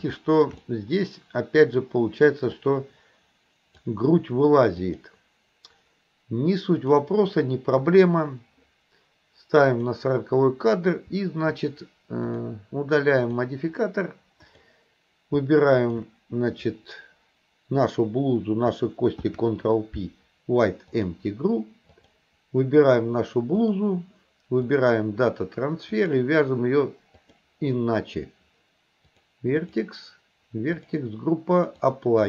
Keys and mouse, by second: 0.2 shift+middle drag, 0.7-1.9 middle drag, 2.7-3.9 drag, 4.8 click, 6.9 click, 9.8 click, 12.3 click, 13.2 click, 14.5 click, 15.8 shift+click, 19.2 ctrl+p, 22.0 click, 23.6-24.9 drag, 25.9 click, 29.2 click, 29.7 click, 30.9 click, 31.7-32.2 drag.